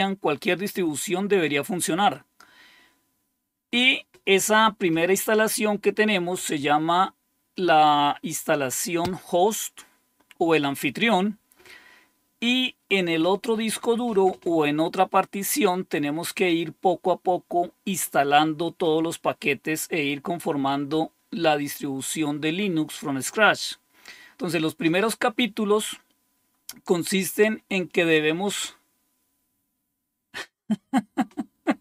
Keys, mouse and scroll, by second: 25.5-27.0 scroll down 2.